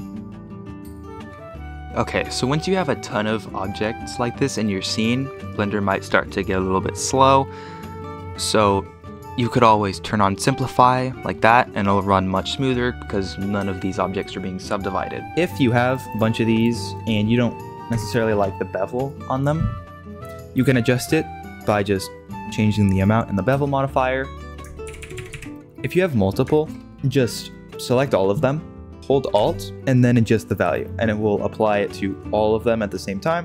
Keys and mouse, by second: 0.0-0.2 typing, 11.3 middle drag, 16.9 middle drag, 17.8 KP_Decimal, 18.5-19.6 middle drag, 23.1-24.3 middle drag, 24.3 ctrl+shift+d, 24.8 shift+r, 24.9 shift+r, 25.1 shift+r, 25.3 shift+r, 25.5 shift+middle drag, 26.1-26.7 middle drag, 27.8-28.3 drag, 30.7-31.8 alt+drag.